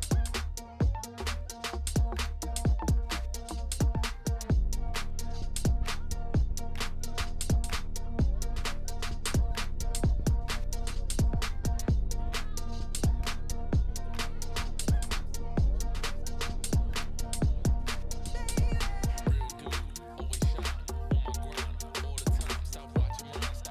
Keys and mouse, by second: 0.5-1.5 drag, 2.3 click, 2.5 z, 3.1 click, 3.6 g, 5.7 click, 6.6 click, 7.2 ctrl+KP_Add, 8.0 click, 8.2 3, 9.8 click, 10.3 g, 12.7 click, 12.9 a, 13.5 shift+n, 14.1 Tab, 14.7 Tab, 14.9 a, 15.4 shift+n, 15.6 Tab, 16.1 middle click, 16.4 shift+middle click, 17.3 middle click, 17.6 shift+middle click, 18.1 Tab, 20.4 click, 20.5 middle click, 20.9 i, 22.2 ctrl+z, 22.7 3, 23.1 3.